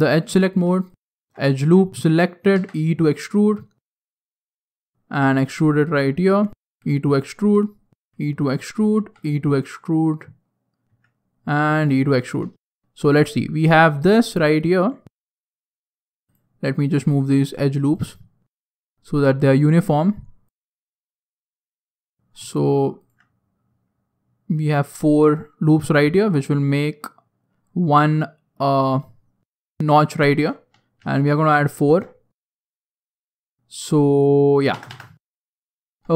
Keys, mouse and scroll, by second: 0.8 alt+right click, 2.5 e, 6.5 e, 8.9 e, 13.6 alt+right click, 14.2 alt+right click, 17.1 alt+right click, 17.8 alt+right click, 18.8 click, 20.4 alt+right click, 21.3 click, 22.9 alt+right click, 23.9 click, 26.2 alt+right click, 27.1 click, 30.9 ctrl+r.